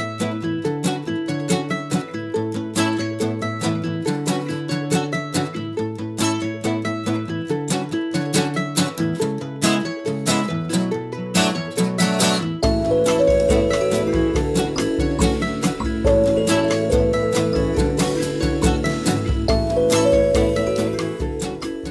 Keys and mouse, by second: 0.0-0.6 typing, 0.3 click, 0.8 middle click, 1.0 Tab, 2.0 click, 3.3 click, 3.7 click, 4.4 middle click, 4.5 click, 4.9 middle click, 5.6 click, 5.8 Tab, 6.0-10.8 typing, 6.1 middle click, 7.8 click, 8.4 click, 8.8 click, 9.3 click, 9.8 click, 10.7 click, 11.0 right click, 11.9 middle click, 11.9 g, 12.2 click, 12.9 z, 13.0 z, 13.1 z, 13.7 ctrl+z, 13.7 click, 14.0 g, 14.7 click, 15.2 middle click, 15.4 right click, 16.0 click, 16.0 Tab, 16.7 middle click, 17.3-19.4 middle drag, 18.6 KP_4, 18.7 KP_1, 19.6 click, 19.8-21.9 middle drag.